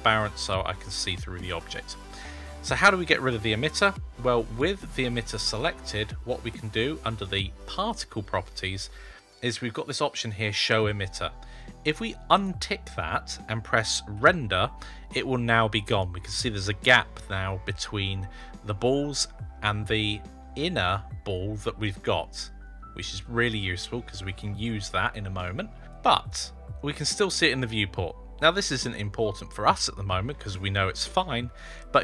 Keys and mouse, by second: 4.8 click, 7.5 click, 12.2 click, 14.0 F12.